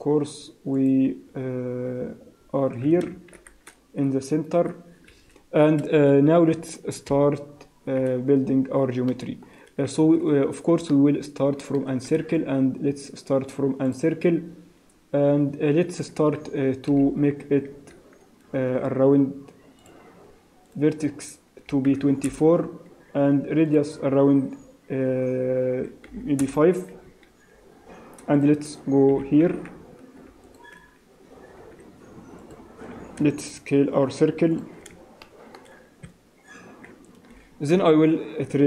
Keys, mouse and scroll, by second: 0.8 click, 1.3-3.1 scroll down 10, 3.1 scroll down 2, 3.3 shift+c, 5.1 KP_1, 6.6 scroll up 4, 7.1 KP_Decimal, 7.5-8.8 scroll up 13, 9.1 shift+middle click, 9.1 shift+scroll up 1, 10.9 shift+middle click, 12.3 shift+a, 14.4 scroll down 4, 15.0-15.3 scroll up 1, 15.6 scroll up 2, 16.9 F3, 20.0 click, 20.7 click, 23.6 click, 27.1 Escape, 28.3 click, 29.1 g, 31.6 s, 32.9 s, 35.2 shift+middle click, 36.1 Tab, 37.4 e.